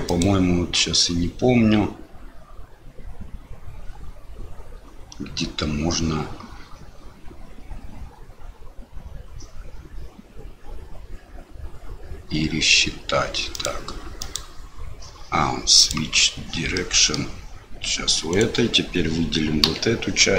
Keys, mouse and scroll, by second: 0.0-13.6 drag, 14.3-16.0 drag, 16.7 middle click, 18.3 click, 19.6 l.